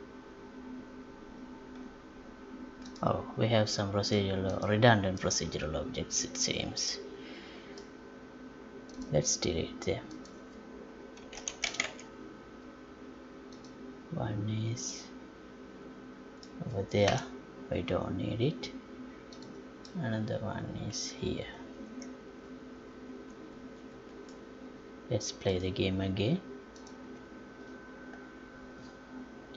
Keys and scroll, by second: 17.1 Delete.